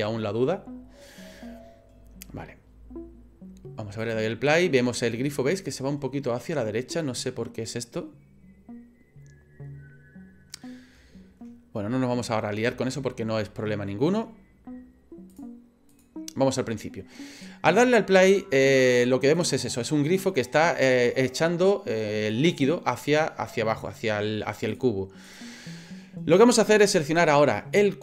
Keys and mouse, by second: 4.1 click, 15.3 click, 15.9 click, 24.7 click, 26.8 right click.